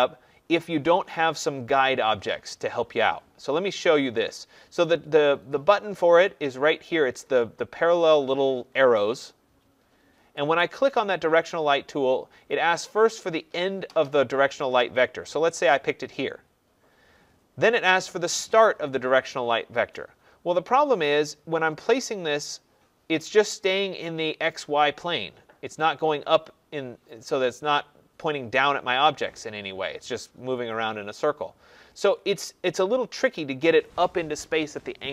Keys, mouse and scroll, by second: 10.6 click, 15.7 click.